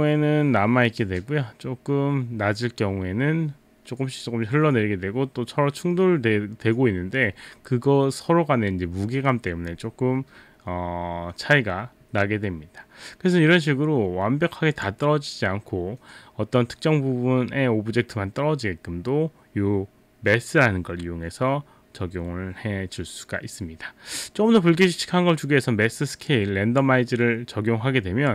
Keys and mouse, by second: 14.8 click, 26.3 click.